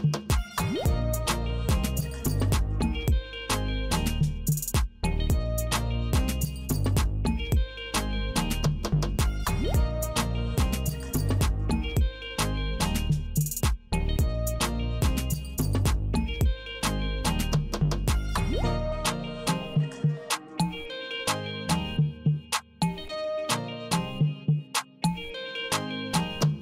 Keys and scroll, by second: 0.5 BackSpace, 1.6 BackSpace, 2.8 BackSpace, 4.0 Left, 5.1 Left, 6.2 Left, 7.3 Left, 8.4 Left, 9.4 Left, 10.6 Left, 12.6 alt+F4, 17.7 Return, 23.1 space.